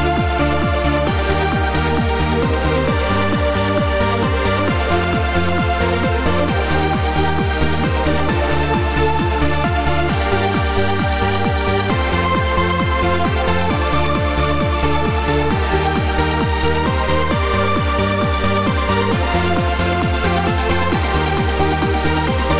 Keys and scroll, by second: 1.5 3, 6.7 2, 7.3 9, 13.9 l, 14.4 w, 16.3 q, 20.0 w, 21.9 q.